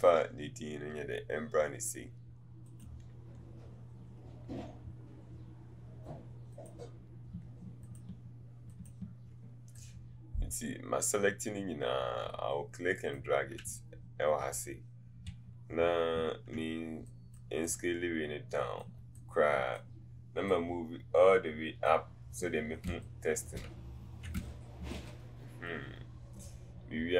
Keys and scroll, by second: 22.9 space.